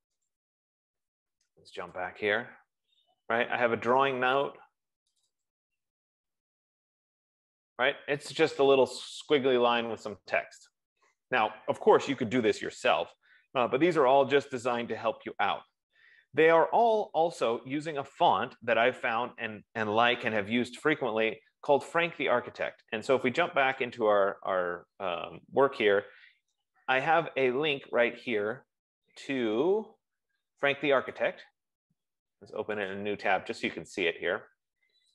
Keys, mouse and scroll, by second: 0.7 click, 2.4 click, 5.6 click, 5.9 click, 24.7 click, 26.3 middle click, 31.6 right click, 33.2 click.